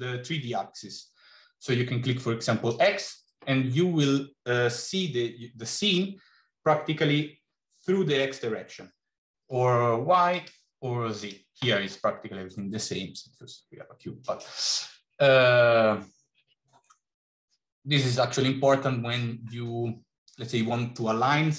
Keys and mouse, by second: 2.6 click, 10.3 click, 11.2 click.